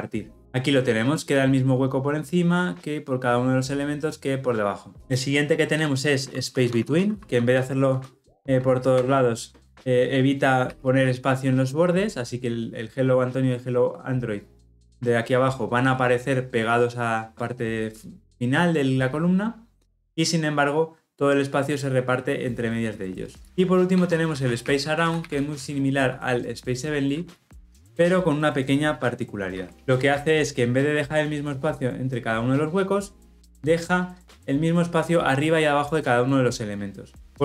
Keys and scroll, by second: 8.9 Return.